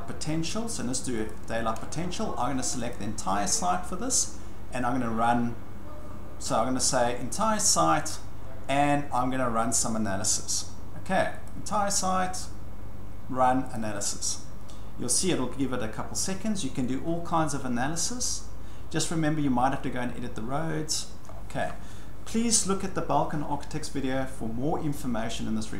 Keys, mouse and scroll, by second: 1.3 click, 2.9 click, 7.6 click, 8.1-10.1 drag, 11.5 click, 13.7 click, 18.9 scroll, 19.0-19.6 scroll up 13, 21.3 scroll down 5, 23.8 scroll.